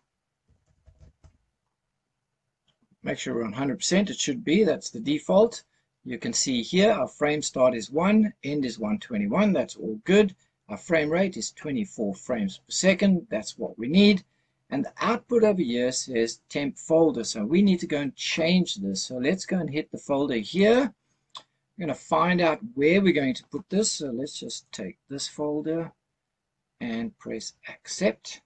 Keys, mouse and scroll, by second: 5.6-6.4 scroll down 2, 13.6-15.4 scroll down 3, 20.5 click.